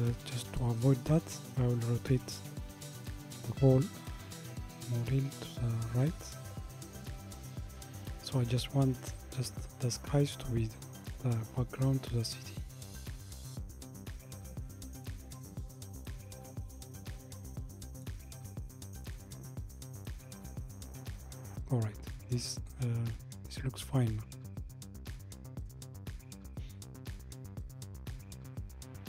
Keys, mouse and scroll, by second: 0.4 a, 2.7 r, 12.6 middle click, 13.3 middle click, 15.5 middle click, 19.2-20.4 drag.